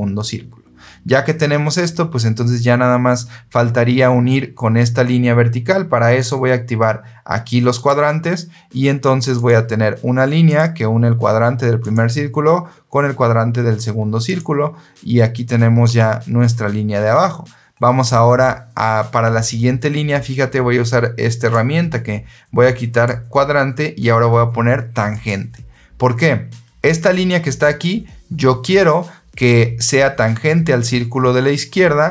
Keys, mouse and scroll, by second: 6.1 click, 7.6 click, 9.2 click, 10.4 click, 11.7 click, 14.2 click, 15.8 Escape, 21.3 click, 22.8 click, 25.0 click.